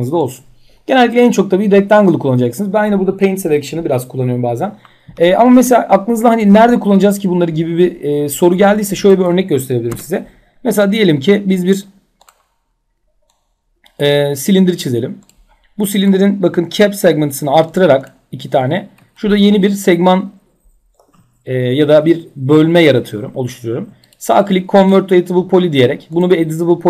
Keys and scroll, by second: 9.4 Delete.